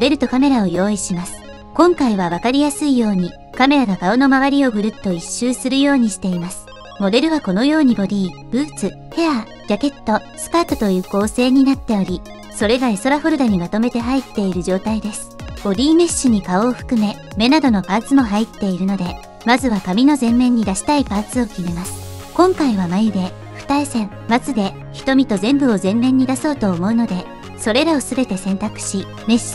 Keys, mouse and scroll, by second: 1.0 n, 1.3 KP_0, 2.5 click, 5.8 click, 7.9 click, 8.5 click, 9.3 click, 10.0 click, 14.4 click, 15.3 middle click, 16.7 click, 17.2 click, 18.2 click, 19.0 click, 20.1 click, 20.6 click, 21.8 Tab, 22.9 click, 23.7 3, 24.1 click, 24.8-29.0 typing, 28.3 middle click, 28.7 middle click.